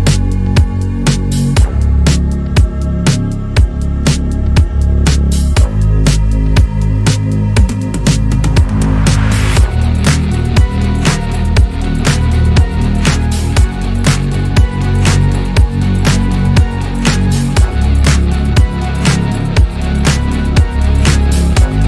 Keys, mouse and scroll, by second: 0.2-0.7 scroll up 1, 0.7 1, 1.1 click, 1.7 g, 2.8 scroll down 1, 3.4 click, 3.7-4.8 shift+middle drag, 4.8 2, 5.1 click, 6.0-7.4 shift+middle drag, 7.4 ctrl+click, 8.0 shift+middle click, 8.9 click, 11.2 scroll down 1, 11.4-11.8 middle drag, 11.8 click, 12.0-12.3 scroll down 1, 12.3-12.7 middle drag, 12.7 scroll up 1, 12.9 click, 13.5 KP_3, 14.0 scroll up 1, 14.2-14.7 shift+middle drag, 14.7 Tab, 14.9 scroll down 2, 14.9-16.2 middle drag, 16.2 click, 17.1 alt+click, 17.8 KP_Decimal, 18.4 scroll down 4, 18.8-19.9 middle drag, 19.9 KP_3, 20.6-21.3 scroll down 1, 21.3 click.